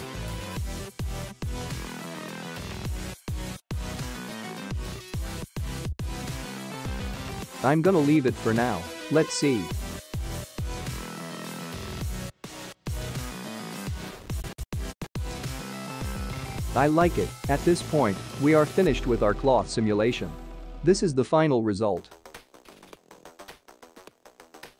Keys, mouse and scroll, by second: 10.1 click.